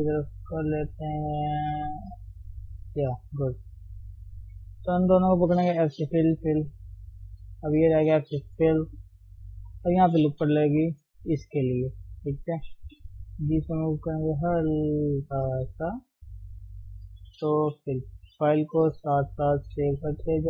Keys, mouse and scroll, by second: 0.1 click, 0.3 g, 1.5 click, 2.3 g, 3.4 middle click, 4.2 click, 5.2 middle click, 5.5-6.1 scroll down 3, 6.1 f, 6.4 f, 6.8 middle click, 7.5 click, 8.7 f, 10.5 ctrl+r, 11.9 KP_1, 13.3 g, 14.6 shift+middle click, 15.0 scroll up 1, 15.2 middle click, 15.9-16.4 scroll up 1, 16.4 click, 17.9 f, 18.2-19.0 scroll down 2, 19.0 Tab, 20.0 ctrl+shift+s.